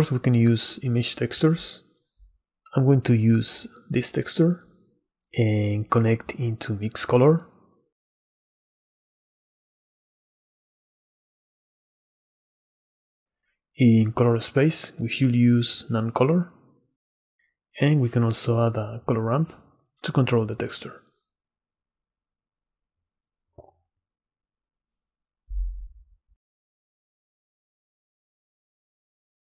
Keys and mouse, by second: 2.5 middle click, 7.3-9.6 drag, 10.0 middle click, 11.6 middle click, 13.3-15.0 drag, 15.3 middle drag, 17.1 shift+a, 21.7-24.8 drag, 24.9 click, 25.3 click, 25.9 middle click, 26.3 shift+middle click, 27.0 middle click, 27.3 click, 27.5 middle click, 27.7 click, 28.2 ctrl+t, 28.9 click.